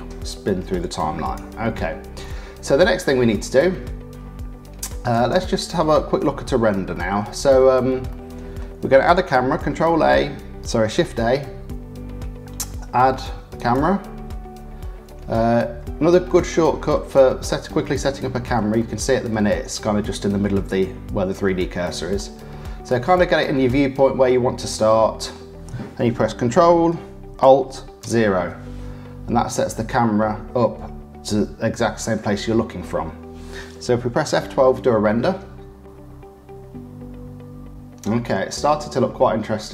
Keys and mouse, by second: 2.2 click, 2.8-3.8 middle drag, 5.1 click, 6.9 click, 8.1 click, 9.5 shift+a, 16.3 click, 17.2 shift+middle click, 17.8 middle click, 18.7 middle click, 22.1 middle click, 23.7-24.9 middle drag, 24.9 click, 28.0 ctrl+alt+KP_0.